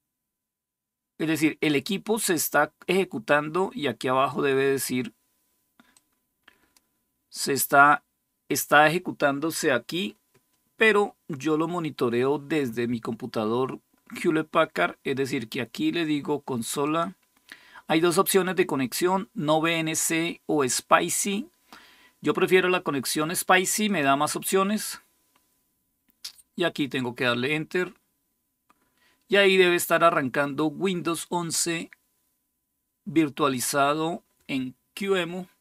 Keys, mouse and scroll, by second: 5.7-7.1 drag, 16.6 click, 23.7 click, 24.4 click, 26.5 click, 33.3 click, 34.1 click.